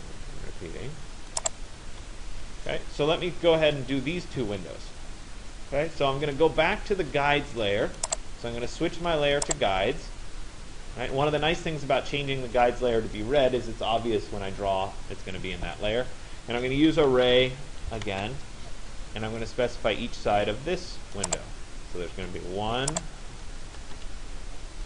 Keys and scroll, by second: 1.5 Return, 16.7 r, 18.1 Return, 23.5 Return.